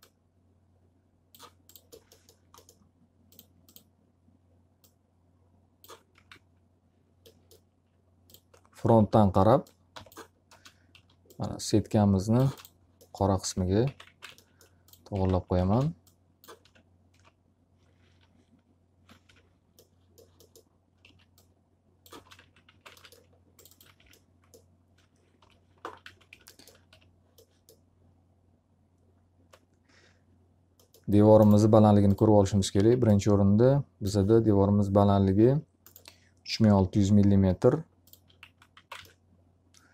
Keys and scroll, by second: 5.6 f, 6.2 z, 8.8 w, 9.8 g, 10.4 space, 10.8 s, 12.4 space, 13.5 alt+a, 13.8-16.6 typing, 14.2 alt+a, 18.1 l, 19.2 F3, 21.0 s, 22.0 space, 22.3 x, 22.6 z, 22.8 alt+a, 23.9 F3, 25.3 l, 26.0 z, 26.2 F3, 26.8 g, 32.2 s, 36.6 alt+r, 38.4 x, 38.7 z, 38.8 alt+a.